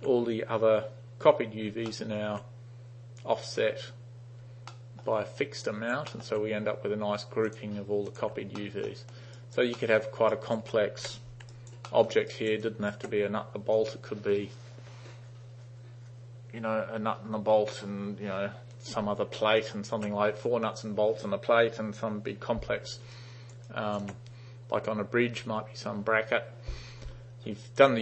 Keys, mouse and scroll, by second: 1.9-2.2 alt+middle drag, 4.8 alt+middle click, 5.7 alt+right click, 6.2 alt+middle drag, 7.5 drag, 8.1 click, 8.6 alt+middle drag, 9.4 alt+right click, 9.8 alt+middle click, 10.4 alt+right click, 11.1 u, 11.6 alt+right click, 11.9 alt+middle drag, 12.4 alt+right click, 12.7 alt+click, 19.6 alt+click, 23.2 alt+right click, 23.7-24.0 alt+drag.